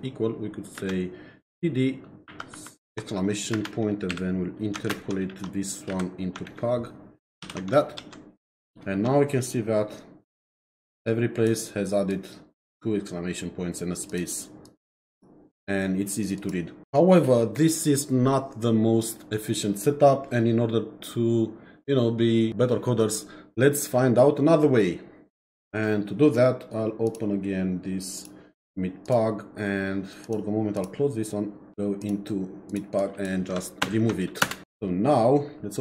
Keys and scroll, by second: 0.8 space, 2.3 shift+1, 3.5 space, 4.1 #, 4.9 ctrl+shift+End, 5.9 Left, 6.5 shift+End, 7.4 shift+[, 8.0 ctrl+s, 33.8 shift+Delete, 34.4 Return.